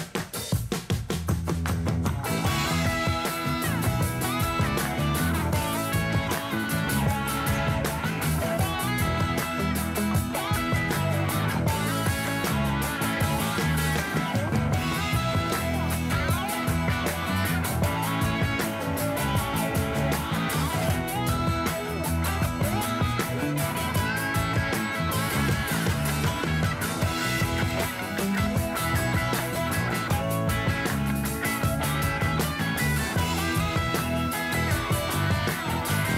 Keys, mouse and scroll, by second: 3.0 click, 4.3 click, 5.6-11.2 drag, 11.6 click, 11.8-13.9 drag, 14.2 click, 14.6-16.9 drag, 17.2 click, 17.6-20.8 drag, 21.5 click, 23.2-26.2 drag, 26.8-29.8 drag, 30.9 KP_3, 32.5 r.